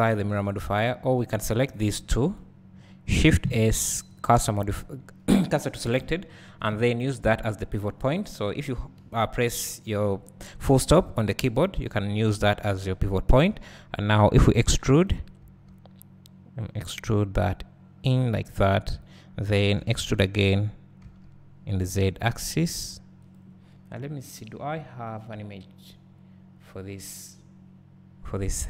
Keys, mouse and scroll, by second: 1.3 click, 1.6-2.3 scroll down 2, 2.3 shift+click, 4.1 shift+s, 7.1 alt+shift+click, 12.1 click, 14.5 e, 15.6 s, 19.9 e.